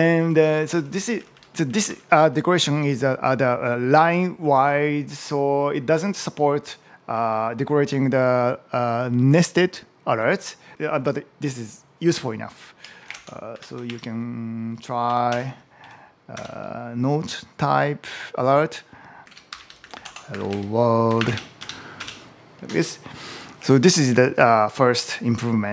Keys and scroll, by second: 0.1 Up, 1.0 shift+Down, 1.7 Up, 12.8 shift+., 13.0 space, 13.4 [, 13.7 shift+1, 22.5 Return.